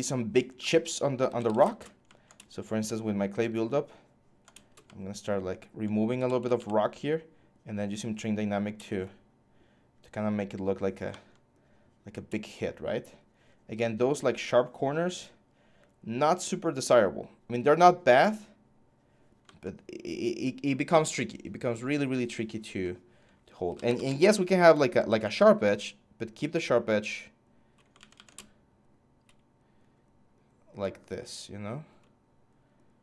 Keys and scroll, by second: 0.8-1.6 typing, 5.7-6.8 typing, 23.2-24.2 typing, 27.7 ctrl+z, 27.9 ctrl+z.